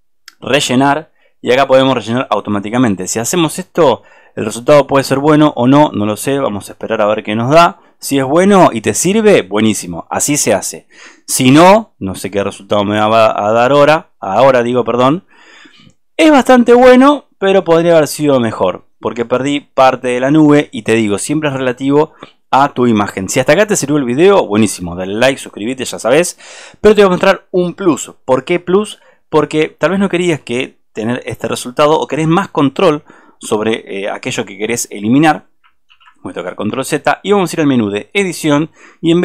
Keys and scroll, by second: 35.6 alt+space, 35.9 ctrl+z.